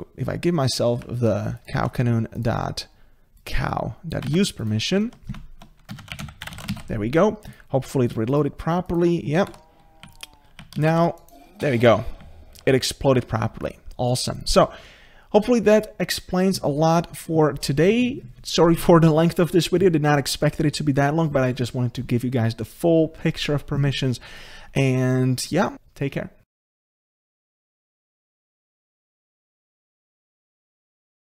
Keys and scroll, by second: 4.3 ctrl+c.